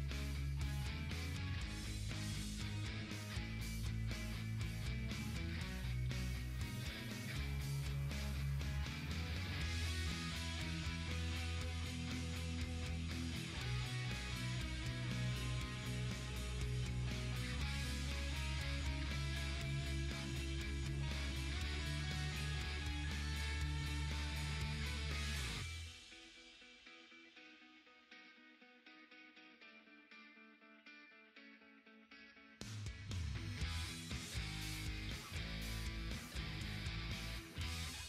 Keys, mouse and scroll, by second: 3.1-3.9 typing, 7.0-9.3 drag, 7.4-8.1 typing, 10.6-15.5 ctrl+drag, 16.1 Up, 16.6 click, 20.5 click, 22.8-31.0 drag, 26.4-27.1 typing, 33.0-38.0 drag.